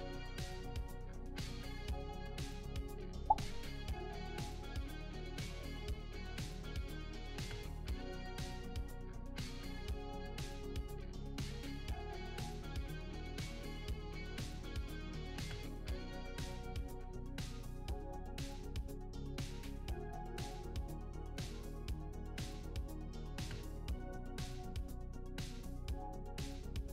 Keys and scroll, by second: 0.0-3.5 typing, 5.0-7.8 typing, 10.2 w, 12.7 shift+d, 12.7 shift+w, 14.7-16.0 typing, 20.6-23.0 typing, 23.5 ctrl+l, 25.0 shift+e, 25.1 shift+s, 25.6 shift+w.